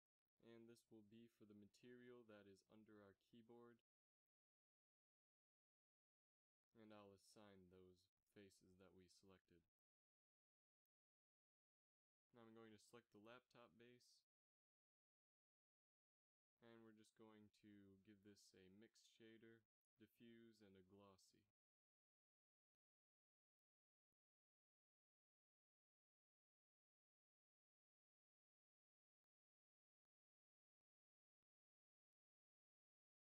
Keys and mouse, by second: 9.7-11.7 drag, 12.6 KP_3, 18.0 Tab, 30.5 click, 30.9 click, 33.0 right click.